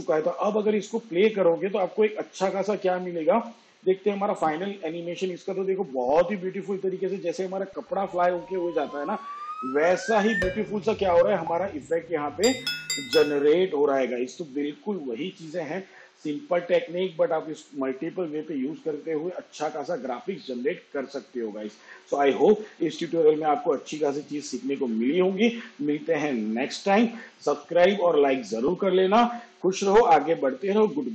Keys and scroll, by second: 2.0 shift+/, 3.4 space.